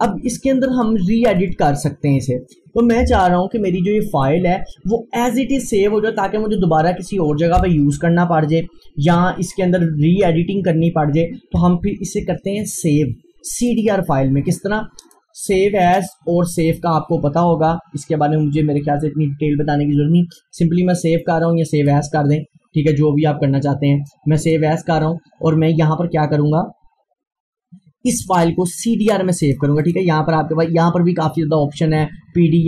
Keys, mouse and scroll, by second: 0.9-3.1 drag, 3.1 Delete, 3.4 scroll down 1, 4.2 click, 13.7 click, 21.8-27.1 drag, 29.4-32.1 drag.